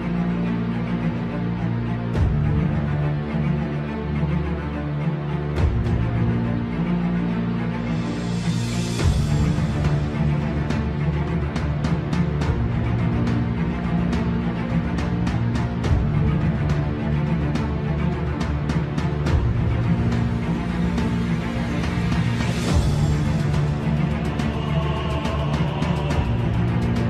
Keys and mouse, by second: 0.2 click, 0.6 Tab, 1.4 KP_1, 3.1 ctrl+r, 5.0 3, 5.6 z, 6.5 click, 7.7 x, 10.8-12.0 drag, 12.9 click, 14.0 z, 14.5 middle click, 15.8 KP_3, 16.9 middle click, 17.8 click, 19.0 KP_3, 22.9 ctrl+right click, 25.3 s.